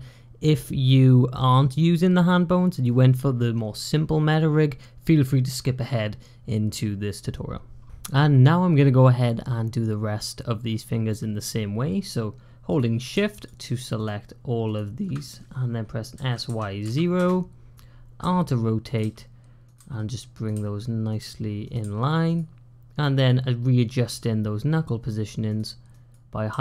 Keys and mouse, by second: 12.5 click, 13.3 shift+click, 13.9 shift+click, 14.6 shift+click, 16.0 s, 18.0-21.7 typing, 22.9 click, 23.9 g, 25.7 click, 26.4 g.